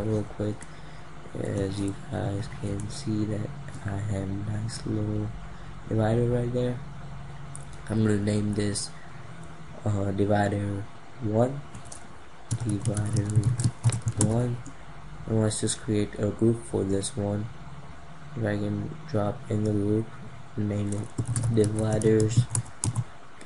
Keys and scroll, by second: 2.2 ctrl+=.